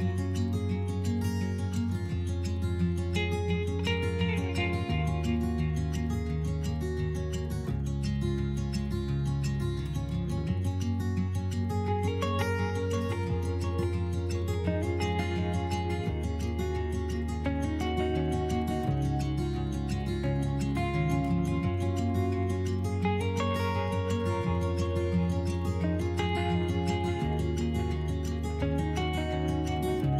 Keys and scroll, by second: 7.1 s, 12.3 s.